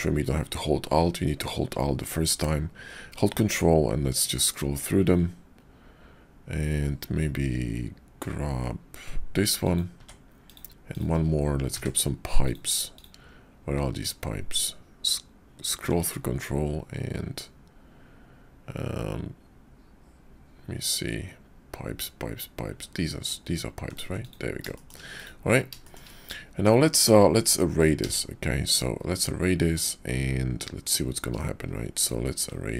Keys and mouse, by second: 10.3 click, 10.9 click, 11.7 d, 24.7 shift+click, 25.2 click, 25.9 shift+click, 26.5 Tab, 27.9 q.